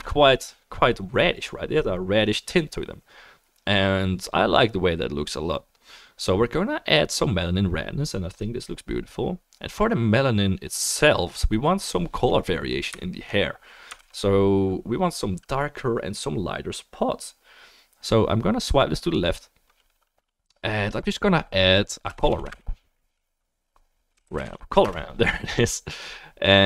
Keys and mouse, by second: 0.4-3.9 middle drag, 14.0 ctrl+s, 17.3-26.0 drag, 17.3-26.1 middle drag, 17.3-26.6 right drag.